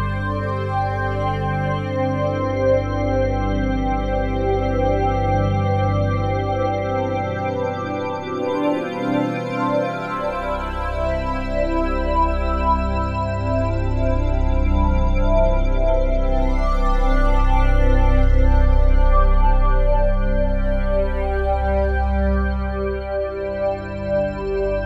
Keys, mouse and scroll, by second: 2.2 g, 3.9 click, 8.5 click, 10.6 click, 12.9 click, 15.4 g, 15.7 z, 16.6 click, 17.3 click, 18.5 g, 18.9 z, 20.4 click, 23.1-24.8 drag.